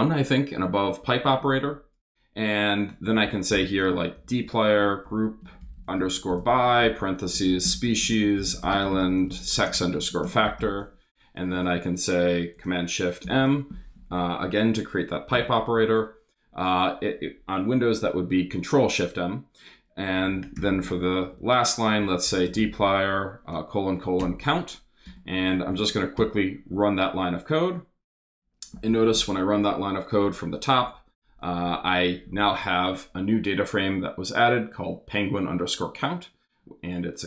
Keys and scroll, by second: 2.8-11.5 typing, 13.2 shift+super+m, 15.3 Return, 19.8-24.2 typing, 25.0 shift+Return, 25.4 Up, 26.0 super+Up, 26.1 super+Return, 28.2 Return.